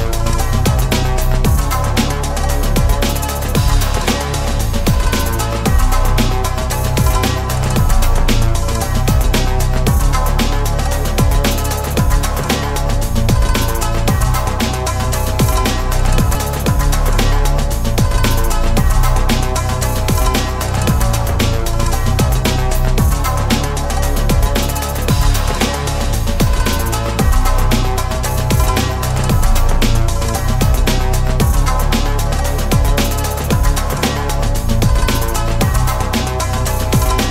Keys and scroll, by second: 35.5 ctrl+z.